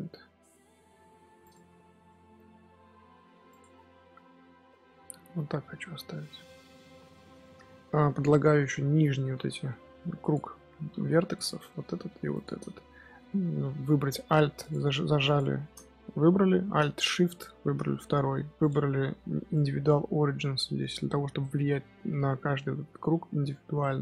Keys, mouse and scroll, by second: 1.6 Tab, 1.9 scroll up 1, 1.9 scroll down 1, 2.0-3.4 middle drag, 3.4 click, 3.6-4.2 scroll down 7, 4.2-6.4 middle drag, 6.4 scroll up 4, 6.6-7.2 scroll down 2, 6.7 middle drag, 7.2 Tab, 8.6 alt+h, 8.7-9.1 scroll up 2, 9.1 z, 9.5 3, 10.1 alt+click, 10.9 2, 11.3 alt+click, 11.6 middle click, 12.2 alt+shift+click, 12.6-14.5 middle drag, 14.5 alt+click, 15.1 alt+click, 17.1 alt+shift+click, 18.5-21.5 drag, 22.3-24.0 middle drag.